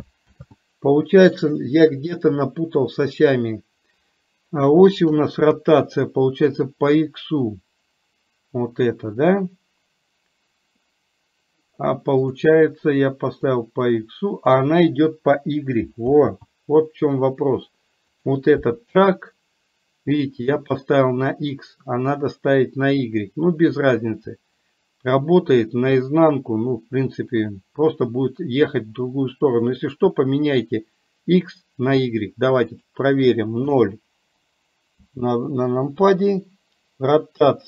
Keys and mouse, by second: 0.4 ctrl+z, 13.6-14.6 drag, 16.2 ctrl+z, 18.2 click, 32.8-35.1 drag.